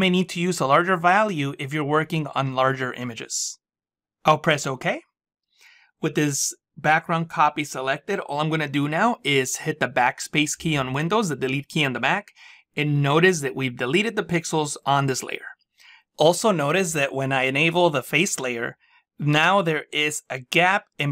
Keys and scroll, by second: 10.4 BackSpace.